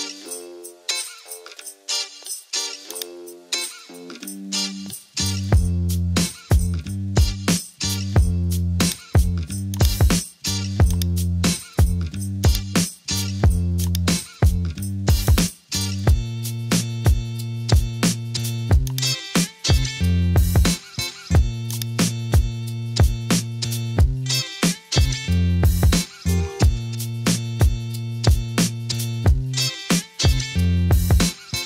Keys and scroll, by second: 17.8 super+d.